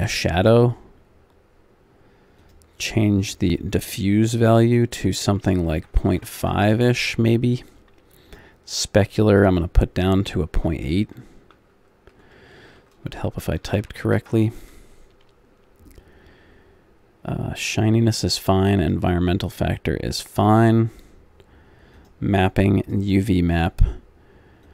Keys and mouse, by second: 0.9-8.3 middle drag, 8.3-18.8 drag, 22.0-24.7 drag.